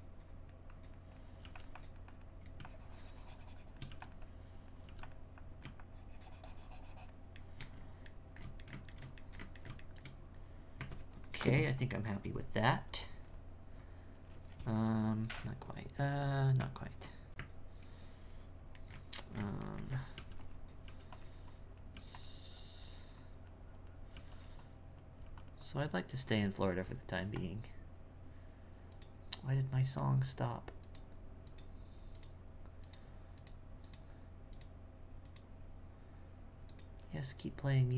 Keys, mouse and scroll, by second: 0.0-1.4 drag, 1.8-3.9 drag, 4.2 click, 5.4-7.5 drag, 7.5-10.8 shift+middle drag, 10.8 Tab, 13.0-13.8 scroll up 3, 13.8-16.6 scroll up 2, 16.6 Tab, 18.8-20.2 ctrl+middle drag, 20.2 f, 20.9 f, 21.5 click, 21.9 f, 22.6-24.1 drag, 24.6 click, 25.6-28.8 drag.